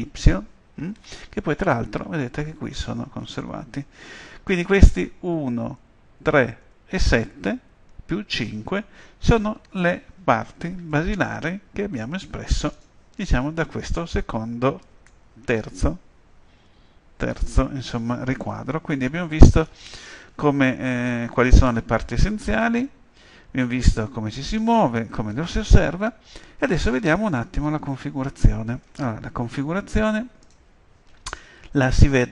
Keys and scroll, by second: 5.4 End, 6.2 Page_Down, 8.5 KP_5, 12.5 KP_5.